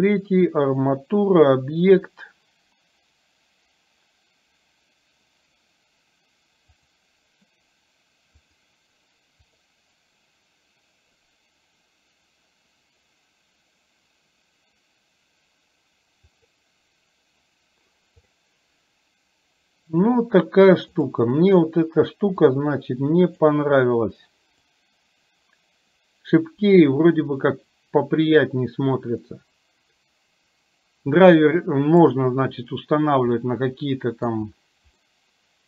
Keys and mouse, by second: 19.5 right click, 22.6-23.5 drag, 24.9-32.2 drag, 33.5-34.4 middle drag, 35.1-35.6 middle drag.